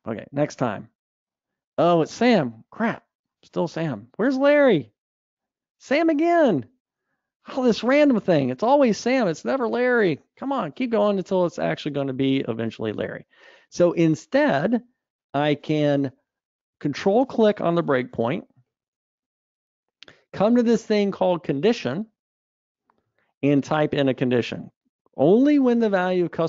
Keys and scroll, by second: 1.4 alt+super+r, 13.8 alt+super+r, 14.0 super+F2, 24.0 super+v.